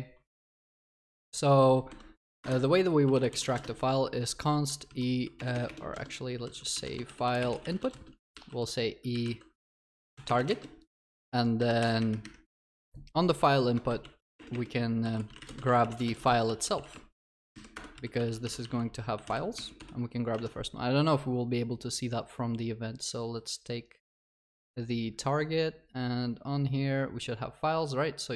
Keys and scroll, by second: 11.9 ctrl+y, 17.8 Return.